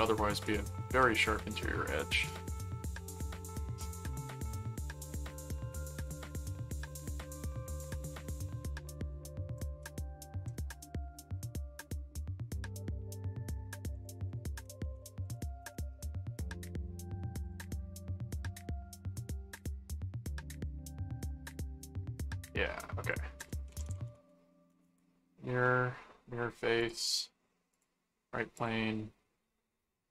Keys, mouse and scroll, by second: 0.3 right click, 1.2 click, 3.1 click, 3.9 click, 4.7 click, 5.9 click, 6.8 right click, 8.5 middle click, 9.6 ctrl+click, 9.7 ctrl+s, 10.3 ctrl+Tab, 11.6 middle click, 13.1 click, 13.9-15.9 typing, 17.4 click, 18.4 click, 18.9 right click, 20.3 click, 21.5-22.9 middle drag, 23.1 click, 23.1-24.6 typing, 24.7 Return, 25.6 middle click, 26.8 click, 27.7 click, 28.5 click.